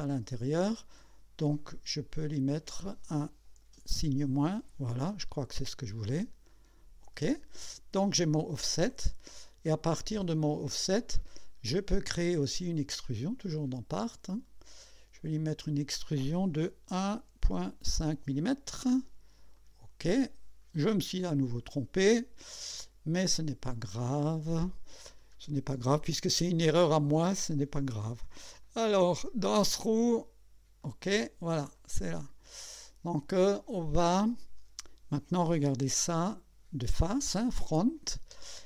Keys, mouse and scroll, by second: 1.6 click, 3.9 KP_Subtract, 6.5 click, 8.5 click, 9.3-11.2 drag, 15.1 click, 16.9 1, 17.4 ., 17.9 5, 19.5 click, 23.4 click, 25.1 scroll down 2, 28.1 click, 28.6 click, 29.5 click, 30.8 click, 31.7-35.1 drag, 35.8 KP_1.